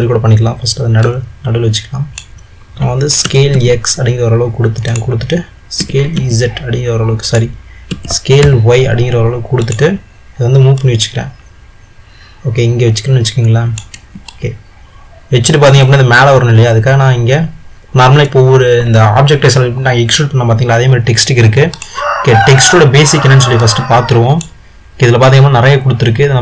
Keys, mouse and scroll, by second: 1.3 click, 3.5 s, 10.9 click, 14.5-17.5 middle drag, 21.9 click, 23.8-26.4 drag.